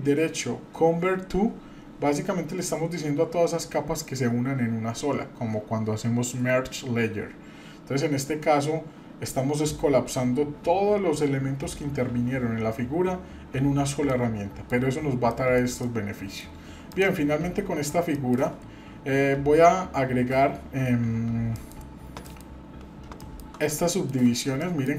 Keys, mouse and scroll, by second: 14.1 middle click, 14.9-15.3 scroll up 1, 15.3 middle click, 15.8 shift+middle click, 16.9 click, 17.4-17.9 scroll up 2, 18.1 shift+middle click, 18.7-19.6 scroll down 2, 21.5 middle click, 22.3 middle click, 22.5-23.8 scroll up 4, 23.2 shift+middle click, 23.9 shift+middle click, 24.2-24.6 shift+scroll up 2, 24.6 shift+middle click.